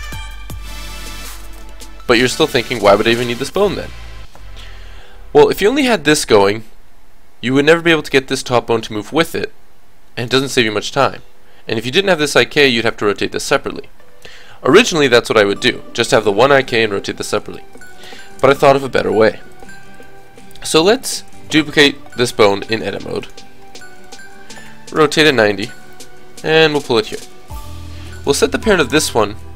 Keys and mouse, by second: 0.4-2.6 middle drag, 0.4 g, 2.6 g, 4.6 KP_3, 5.9 g, 8.8 g, 12.3 r, 13.6 middle click, 17.3 a, 17.6 a, 17.8 alt+r, 18.1 alt+g, 19.5-20.7 drag, 21.5 shift+d, 22.3 click, 22.8 click, 23.7 shift+d, 24.7 r, 26.1 g, 28.2-29.5 drag.